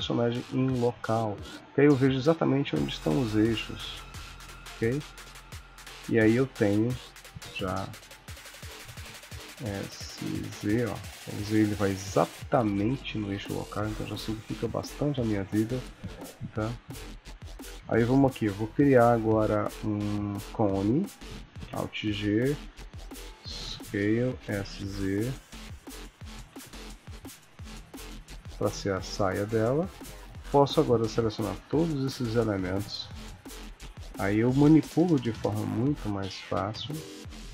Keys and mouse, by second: 0.6 r, 2.7 click, 3.2 r, 4.0 click, 4.2 r, 5.5 click, 6.2 g, 8.6 click, 9.4 s, 12.6 middle click, 13.6 middle click, 14.2 KP_1, 17.9 shift+a, 21.6 alt+g, 22.6 s, 23.6 g, 24.4 s, 25.9 g, 29.7 click, 30.2 shift+click, 30.5 click, 30.8 click, 31.5 shift+d, 33.4 click, 33.8 r, 34.9 g.